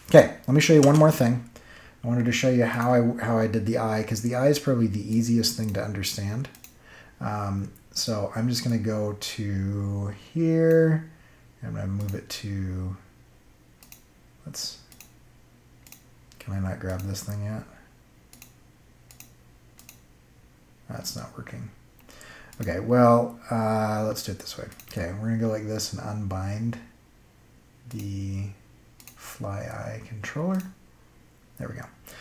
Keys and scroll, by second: 0.7 space.